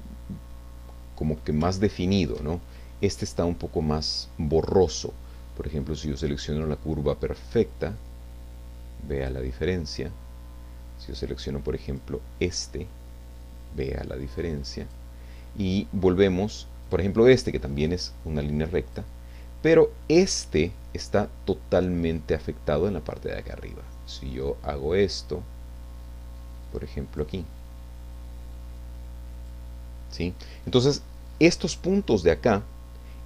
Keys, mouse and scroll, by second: 0.4 scroll up 1, 0.7 middle click, 1.0 scroll down 1, 1.7 shift+middle click, 6.2 click, 7.7-9.5 drag, 11.9 click, 12.9-15.1 drag, 16.8 click, 18.2 click, 20.0 click, 24.3-27.4 drag, 28.2-29.7 drag.